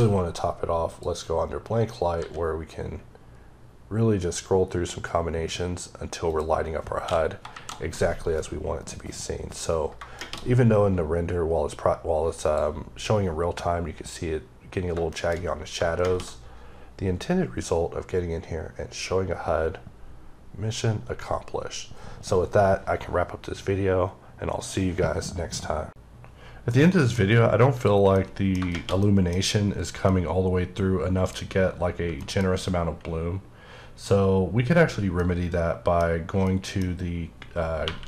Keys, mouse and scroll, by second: 0.8 click, 2.0 s, 3.0-3.7 scroll up 1, 6.2 click, 7.4 shift+Left, 12.3 click, 12.8-14.8 scroll up 1, 15.0 middle click, 15.4 scroll down 1, 27.1-27.5 scroll up 3, 27.7 click, 28.1 middle click, 29.0 middle click, 30.0 middle click, 32.2 middle click, 34.7 scroll down 1, 35.1 middle click, 37.8 typing.